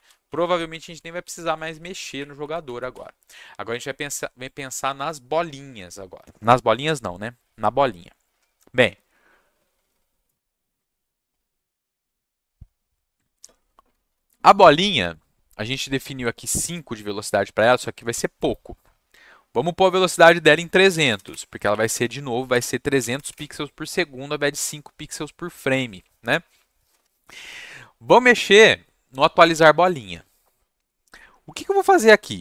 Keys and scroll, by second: 0.0-2.9 typing, 0.7 Down, 21.6 Down, 21.7 Left, 22.0 Right, 22.5 BackSpace.